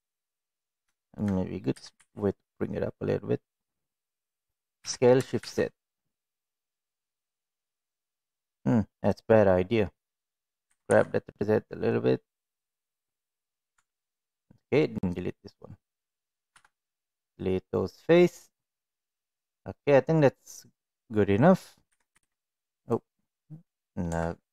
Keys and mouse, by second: 0.9 shift+middle click, 1.7 g, 4.8 s, 10.7 g, 13.7 Tab, 14.4-15.8 drag, 16.5 Delete, 21.9 g, 22.1 z, 24.0 Tab.